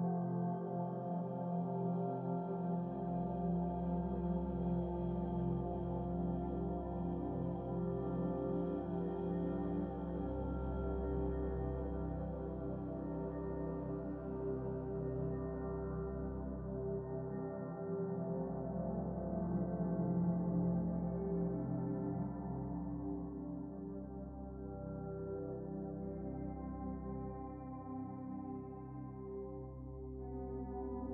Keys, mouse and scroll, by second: 1.7 click, 2.6-3.7 shift+middle drag, 3.7 click, 4.5-5.4 drag, 5.5 click, 5.9 click, 9.8 click, 10.8-14.1 drag, 14.9-16.1 shift+middle drag, 16.1 click, 17.0-19.4 drag, 20.8 click, 21.6 ctrl+s, 29.3 scroll down 2, 29.9 shift+middle click, 30.6 scroll down 1, 30.8-31.1 middle drag.